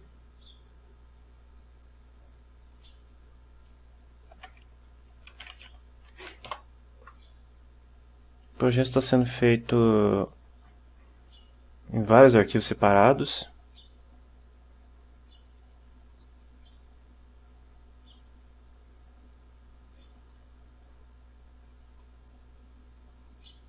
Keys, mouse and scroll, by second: 2.8 click, 5.2-6.1 typing, 6.3 Down, 6.6 Return, 10.1 click, 16.2 click, 20.3 click, 21.8 click, 23.3 click.